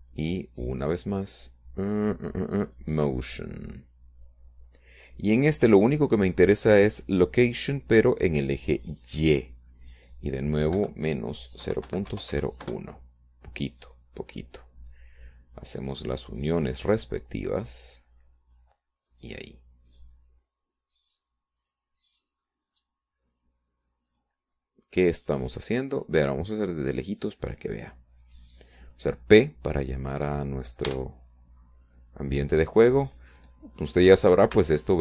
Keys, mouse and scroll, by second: 1.5 click, 2.2 click, 3.0 click, 5.5 click, 6.6-7.8 middle drag, 11.8 click, 13.6 KP_Subtract, 14.5 KP_0, 14.8 KP_Decimal, 15.0 KP_0, 15.2 KP_1, 15.5 KP_Enter, 18.4 click, 20.6-21.6 drag, 22.8 click, 24.0 click, 24.5 click, 25.0 click, 25.3-27.0 middle drag, 27.0 click, 27.3-29.1 middle drag, 29.1 scroll down 1, 29.4 middle click, 33.8 p.